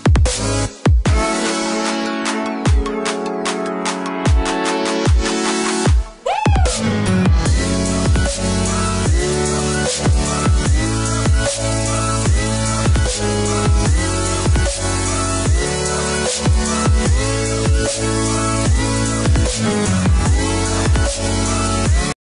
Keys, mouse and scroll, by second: 0.1 scroll down 1, 1.1 click, 3.5-4.3 scroll down 1, 4.3 click, 10.4-10.9 scroll up 1, 10.9 scroll down 1, 13.1-13.5 scroll up 1, 13.5-15.7 scroll down 1, 16.1 ctrl+Num_Lock, 17.1 ctrl+shift+F12.